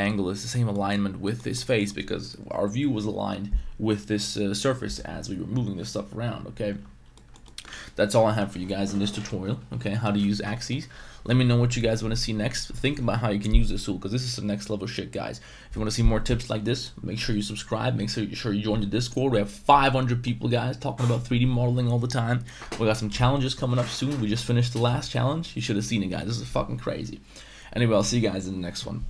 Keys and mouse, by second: 0.0 middle click, 0.7 middle click, 1.2 middle click, 1.5 middle click, 7.0 Tab, 7.1 middle drag, 7.4 middle drag, 7.7 ctrl+s.